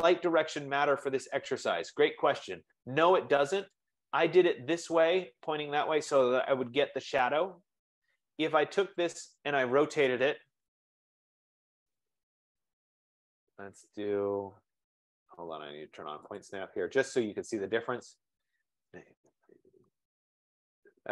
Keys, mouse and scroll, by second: 3.6 click, 3.9-8.9 drag, 9.1-11.0 drag, 11.5-13.8 typing, 16.0 Return, 16.6 click, 18.2 click, 19.0-20.7 typing.